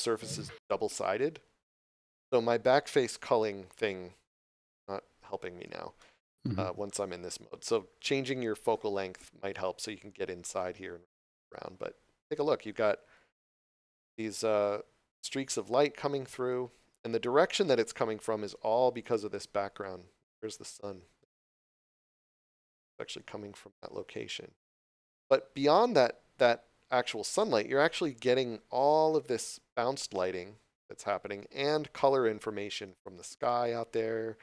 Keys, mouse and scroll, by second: 4.4 middle click, 9.5 scroll up 1, 10.5 middle click, 18.4 scroll down 1, 19.1 middle click, 24.1 scroll up 1, 25.7 middle click.